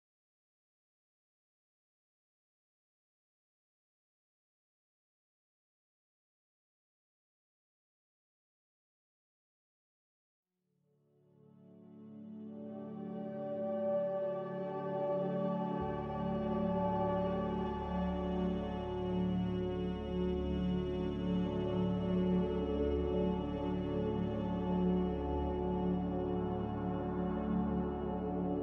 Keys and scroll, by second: 7.5 Delete, 9.1 Delete, 19.5 Escape, 19.8 Escape, 22.3 Escape, 22.4 Escape, 23.7 Escape, 23.8 Escape, 23.9 Escape, 24.8 F9.